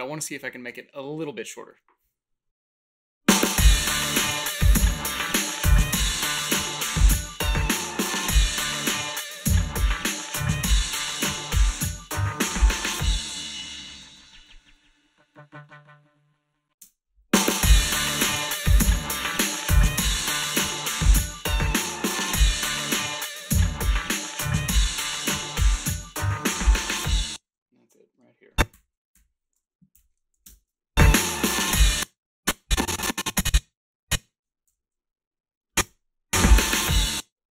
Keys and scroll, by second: 2.4 a, 2.7 space, 16.8 space, 27.1 space, 29.1 =, 30.0 h, 30.4 space, 30.4 a, 31.8 space, 34.7 g, 35.8 space, 36.9 space.